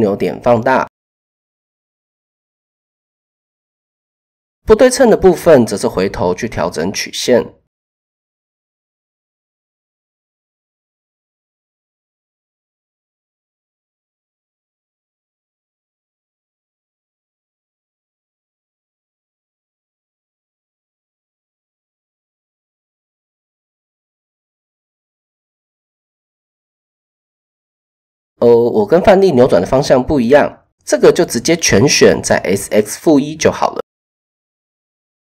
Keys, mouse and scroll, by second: 0.8 Tab, 2.5 Tab, 4.3-6.8 drag, 7.0 Tab, 8.9 click, 9.3 Tab, 9.7 a, 10.2 s, 13.7 middle click, 16.8 click, 18.5 s, 22.0 s, 23.2 click, 23.5 s, 24.6 middle click, 25.7 click, 26.0 click, 26.7 KP_7, 27.6 shift+middle click, 31.5 a, 32.3 s, 34.1 click.